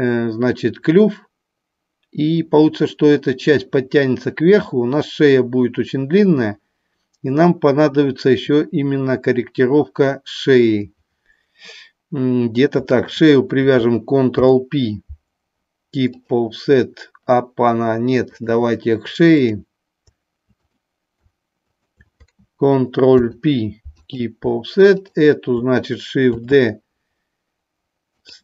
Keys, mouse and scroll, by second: 19.4 click, 21.7 shift+click, 24.8 click, 28.1 click.